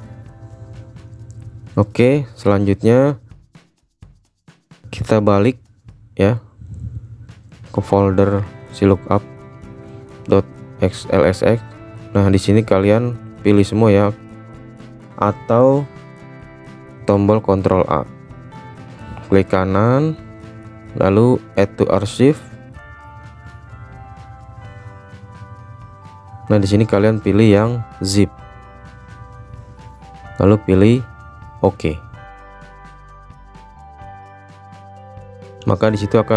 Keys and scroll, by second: 15.8 ctrl+a.